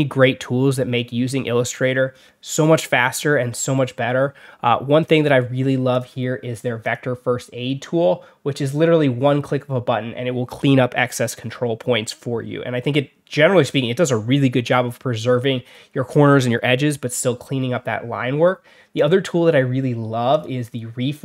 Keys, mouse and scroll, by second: 5.0 click, 5.8 click, 6.7 click, 18.9 click, 20.2 click, 21.1 alt+middle click.